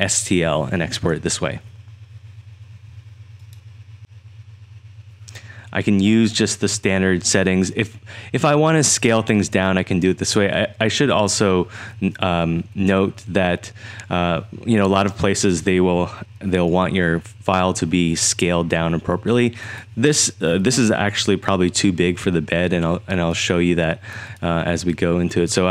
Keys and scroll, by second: 21.7 3.